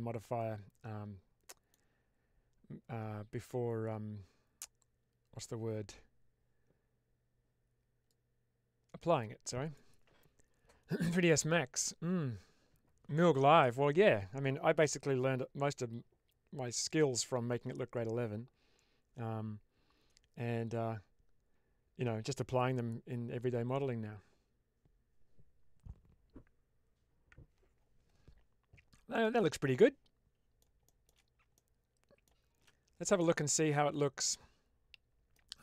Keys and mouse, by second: 8.0-9.6 drag, 29.1-30.6 middle drag, 30.9 shift+middle click, 31.4-32.2 middle drag, 33.1-33.7 middle drag, 34.2-35.2 middle drag.